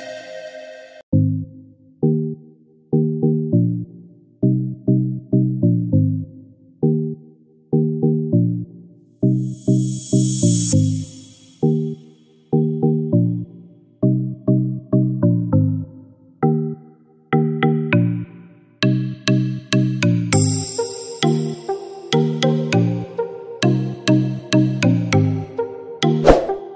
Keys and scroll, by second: 1.6-2.5 typing, 4.9 typing, 6.0-6.3 typing, 8.0-8.6 typing, 15.0 ctrl+shift+a, 18.6 ctrl+-.